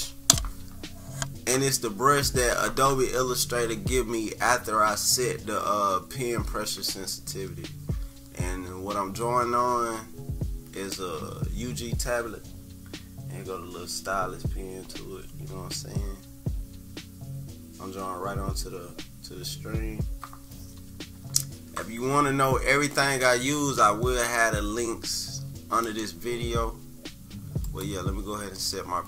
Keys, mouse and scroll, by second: 27.6-29.0 drag.